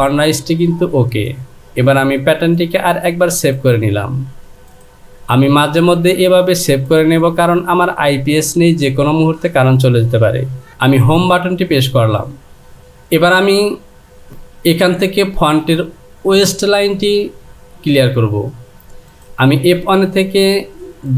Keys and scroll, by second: 14.3 Return.